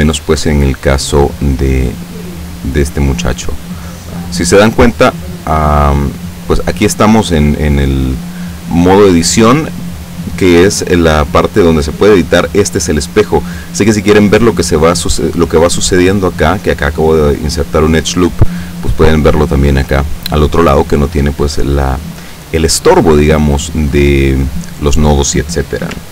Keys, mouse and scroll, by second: 3.2 click, 6.6 click.